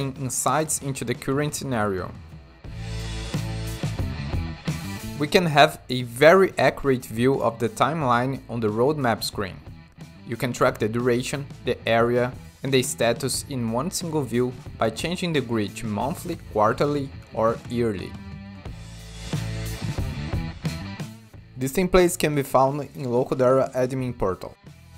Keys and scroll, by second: 1.4 8, 1.5 Tab, 2.5 4.